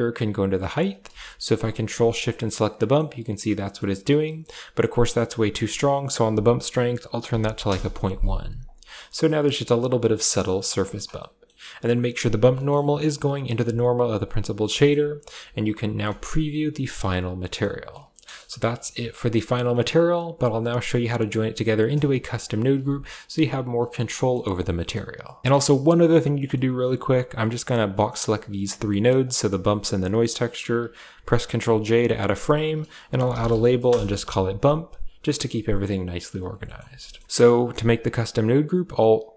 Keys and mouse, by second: 1.5 ctrl+shift+click, 1.8 click, 2.4-2.8 middle drag, 4.1 middle click, 5.3-7.5 drag, 8.4 click, 9.0 middle click, 10.7 click, 11.0 middle click, 12.3 middle click, 13.7 ctrl+shift+click, 14.6 shift+middle click, 15.4 ctrl+shift+click, 16.1-17.4 drag, 18.1 KP_0, 18.6 a, 19.5 click, 20.9 click, 21.9 click, 22.0 g, 22.6 a, 22.9 click, 23.1 g, 23.9 middle click, 24.6 middle click, 25.4 a, 26.2 middle click, 27.7-28.4 drag, 28.5 g, 31.0 ctrl+j, 31.6 click, 32.2 F2, 34.1 a, 34.7 click, 35.5 middle click, 36.1 a, 36.5 middle click, 36.7 a, 36.9 click, 37.3 click, 38.4-39.3 drag.